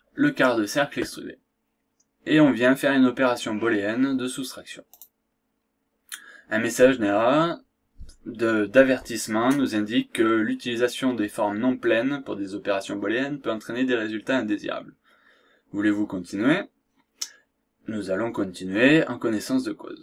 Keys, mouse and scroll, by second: 4.9 click.